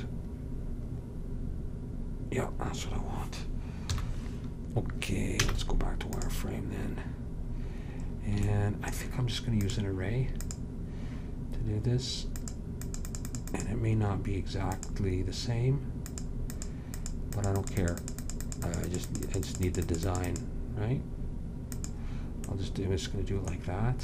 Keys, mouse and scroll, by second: 1.1-4.0 middle drag, 4.0 KP_7, 5.5 z, 9.7-14.4 drag, 14.9-23.7 drag, 23.7 middle click.